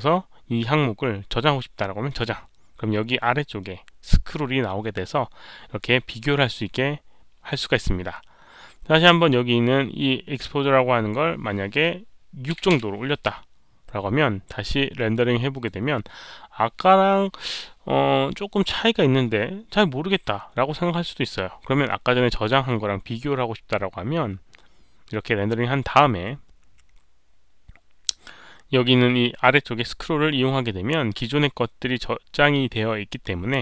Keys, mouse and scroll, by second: 2.0 click, 3.5-7.5 drag, 10.3 click, 12.6 Return, 12.6 click, 12.6 KP_6, 15.5 click, 19.2 click, 21.2 Return, 21.2 click, 21.2 KP_6.